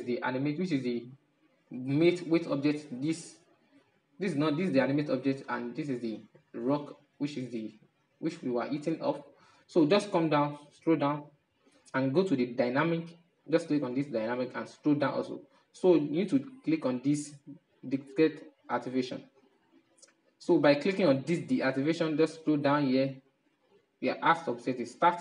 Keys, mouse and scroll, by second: 3.7 right click, 4.9 right click, 5.6-8.9 middle drag, 8.9-12.3 scroll down 9, 12.3-13.1 drag, 13.1-16.7 scroll down 4, 20.1 click, 21.0-22.0 drag, 22.0-22.9 scroll down 3, 22.9-23.4 scroll down 3, 24.5 click.